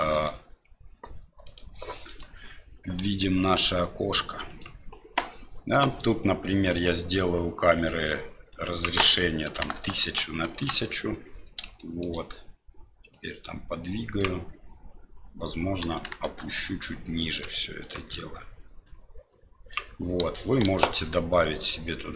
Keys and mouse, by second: 1.4 right click, 2.0 right click, 3.0 g, 7.7 click, 8.7-11.3 drag, 9.7 KP_0, 11.7 shift+middle click, 13.2-14.2 drag, 15.8 KP_1, 16.2 KP_3, 17.8 shift+right click, 18.8 click, 20.6 shift+a.